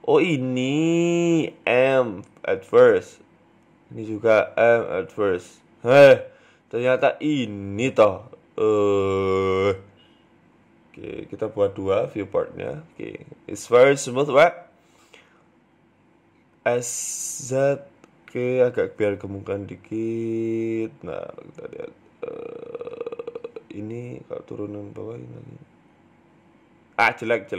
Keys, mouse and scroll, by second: 0.3 ctrl+z, 0.7 shift+right click, 1.0 shift+middle click, 1.7 m, 2.9 right click, 3.2 shift+right click, 3.9 ctrl+z, 4.3 shift+right click, 5.0 m, 5.8 middle click, 6.5 right click, 7.0 middle click, 7.3 Tab, 7.5 middle click, 9.4-11.4 scroll down 4, 11.4 middle click, 11.8 click, 12.2 middle click, 13.5 KP_3, 13.9-15.2 scroll up 4, 14.2 shift+middle click, 15.2 scroll down 1, 15.4 Tab, 15.4-15.8 scroll down 1, 15.8 click, 16.2 s, 17.5 Tab, 17.7 middle click, 18.7 Tab, 18.9 middle click, 19.9-20.5 scroll down 3, 20.1 middle click, 20.5 KP_1, 20.9-21.5 scroll up 1, 21.5 scroll down 1, 22.1 Tab, 22.5 Tab, 22.8 click, 23.6 g, 25.0 click, 25.5 g, 26.4 Tab, 26.5 middle click, 27.1 ctrl+z, 27.2 ctrl+z, 27.4 ctrl+z.